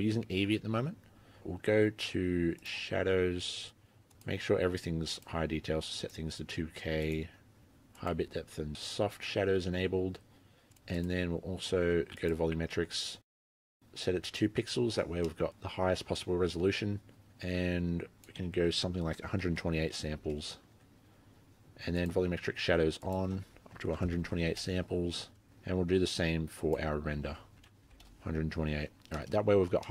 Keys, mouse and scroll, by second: 0.2-0.9 scroll down 2, 0.9-2.6 scroll down 3, 2.6 click, 2.9-4.1 scroll down 4, 4.1 click, 6.0 click, 8.0 click, 10.7 click, 11.0 click, 12.2 click, 13.7 click, 15.3 middle click, 18.2 click, 22.1 click, 23.1 click, 25.3-26.6 scroll up 13, 26.6 click, 28.8 middle click, 29.1 scroll down 3, 29.2 middle click, 29.4 scroll up 4, 29.6-29.9 scroll down 3, 29.8 middle click.